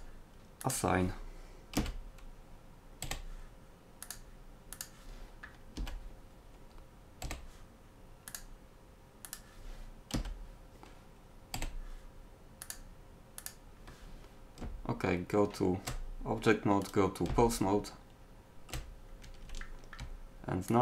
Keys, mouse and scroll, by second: 1.8 a, 3.0 l, 5.8 a, 7.3 l, 10.2 a, 10.5 click, 11.6 l, 14.7 Tab, 19.2 click.